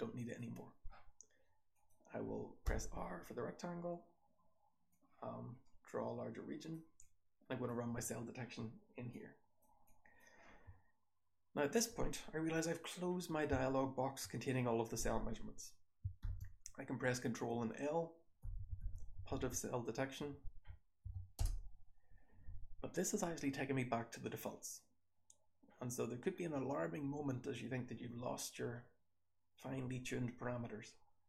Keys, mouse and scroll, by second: 1.6 click, 1.6-2.6 scroll down 1, 2.6-4.8 scroll down 1, 2.6 r, 4.8-6.6 drag, 4.8-6.6 scroll down 1, 6.6-7.6 scroll down 1, 7.0 click, 7.6-9.0 scroll down 1, 9.0-9.5 drag, 9.0-13.4 scroll down 1, 9.8 click, 16.2 ctrl+l, 21.3 l.